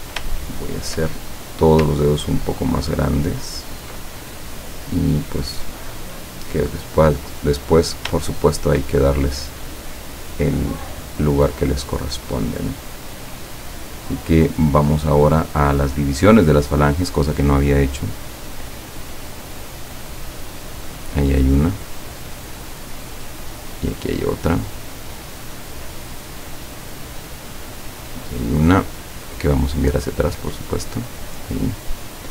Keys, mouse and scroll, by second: 0.4 shift+click, 2.0-4.1 ctrl+drag, 4.3-7.2 ctrl+drag, 7.3 click, 7.9 click, 8.4 shift+click, 9.0-11.8 shift+drag, 12.8 click, 15.8 click, 19.0 click, 19.7 click, 20.6 click, 22.1 click, 22.9 click, 23.7 click, 25.7 click, 26.6 click, 27.7 click, 29.1 click, 30.4 click, 30.7 click.